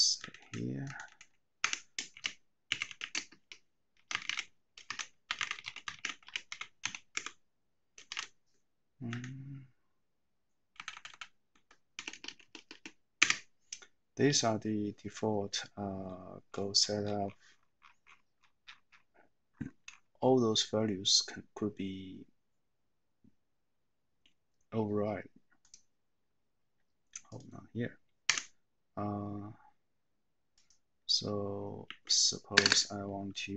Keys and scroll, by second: 0.2 Up, 0.4 Up, 0.9 Up, 1.1 Up, 1.6 Escape, 2.7-4.2 typing, 5.3-8.1 typing, 9.2 typing, 10.9 Left, 12.0-13.2 typing, 28.4 Escape, 31.9 a, 32.5 space, 32.7 space.